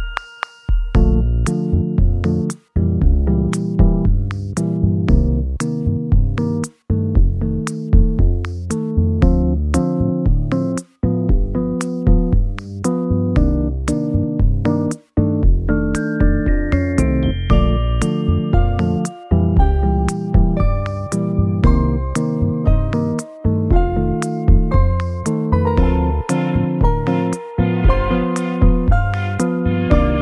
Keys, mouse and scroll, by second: 0.2-0.5 scroll up 1, 0.6 middle click, 3.3 m, 3.3 r, 8.2 r, 8.5 y, 14.5 middle click, 15.3 m, 15.3 r, 18.1 scroll down 1, 18.5 middle click, 21.6 middle click, 24.5 middle click, 25.1-25.4 scroll up 3, 25.6 middle click, 26.5 scroll up 1.